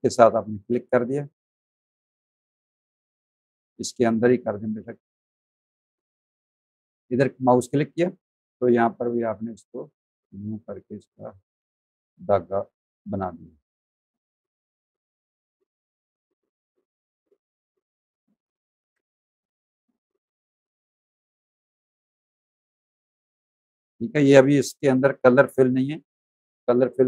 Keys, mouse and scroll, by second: 0.3 shift+click, 2.0 ctrl+z, 6.7 shift+click, 8.7 click, 12.0 click, 12.8 ctrl+z, 13.6 click, 15.0 ctrl+z, 16.2 click, 18.1 ctrl+z, 19.6 click, 22.2 click, 22.7 ctrl+click, 23.1 z, 23.4 alt+click, 23.8 click, 24.6 v, 24.9 click, 25.2 click.